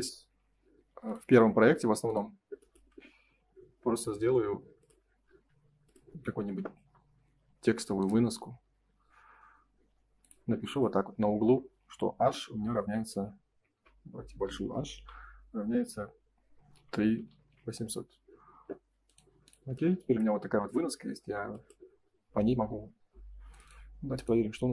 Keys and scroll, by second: 13.7 BackSpace, 14.4 shift+h, 14.9 =.